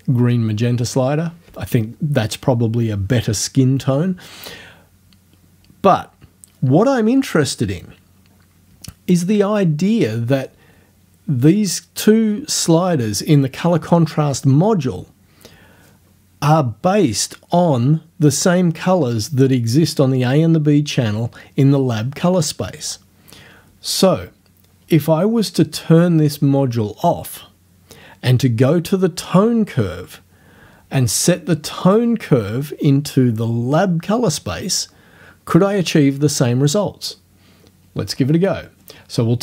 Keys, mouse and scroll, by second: 31.9 click.